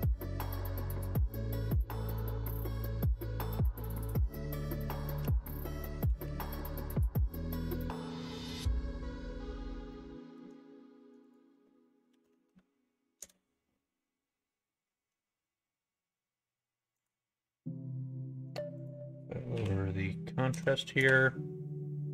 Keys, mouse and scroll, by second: 2.0 middle click, 4.2-8.8 drag, 9.8 middle click, 11.2-15.3 drag, 17.0 click, 18.7-22.1 drag.